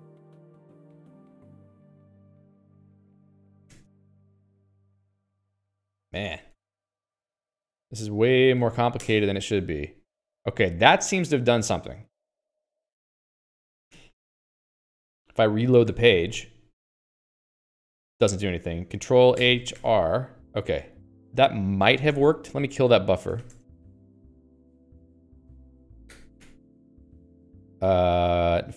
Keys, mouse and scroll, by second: 0.0-4.2 typing, 3.1 ctrl+s, 4.3 Escape, 5.0 ctrl+s, 5.2 Escape, 5.6-7.4 typing, 8.1 alt+x, 9.0 ctrl+j, 13.5 Escape, 13.9 ctrl+s.